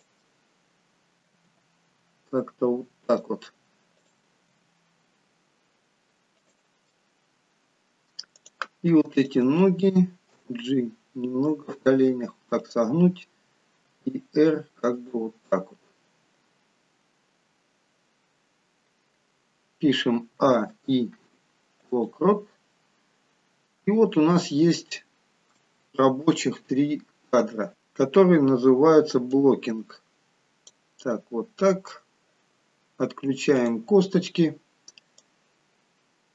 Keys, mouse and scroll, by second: 0.2 middle click, 1.6 g, 4.1 click, 4.6 g, 7.0 middle click, 8.5 click, 9.3 shift+click, 10.4 g, 14.1 r, 20.5 a, 20.8 i, 22.9-24.8 scroll down 11, 24.9 shift+middle click, 26.3 KP_3, 27.4 scroll up 2, 29.5 click, 31.2-31.7 scroll down 1, 31.7-32.5 scroll down 2, 33.8 click.